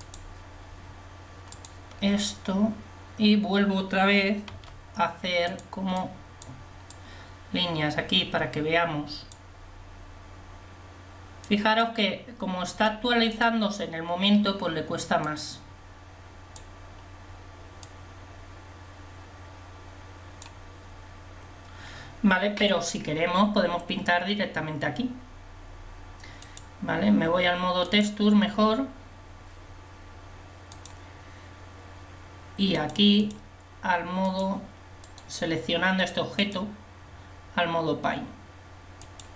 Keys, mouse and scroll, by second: 5.5 f, 6.7-10.0 drag, 11.7-15.1 drag, 15.7-17.5 drag, 18.1-20.0 drag, 30.7 click, 35.5 click.